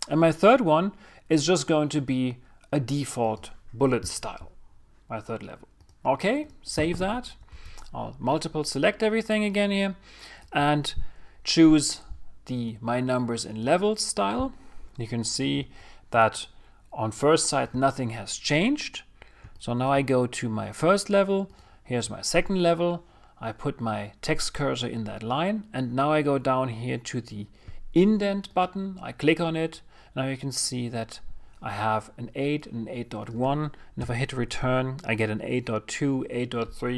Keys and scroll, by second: 9.5 super+a, 36.0 Return.